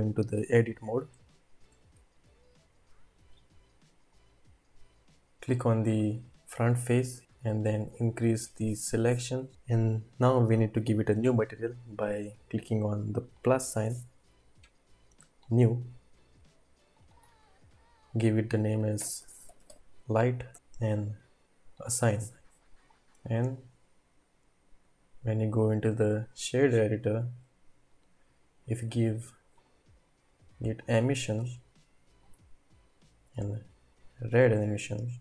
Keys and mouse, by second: 1.3 shift+middle click, 4.2 click, 5.5 click, 7.5 ctrl+Right, 7.8 ctrl+Right, 8.2 ctrl+Right, 8.6 ctrl+Right, 13.6-15.7 drag, 16.9-20.5 drag, 22.0-23.7 drag, 26.3 typing, 27.9-29.0 drag, 29.5 click.